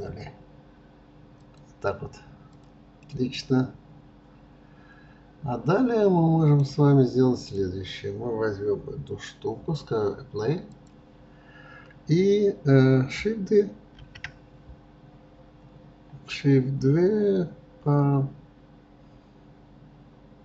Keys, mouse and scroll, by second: 2.5 click, 3.1-6.1 middle drag, 7.4 click, 10.7 drag.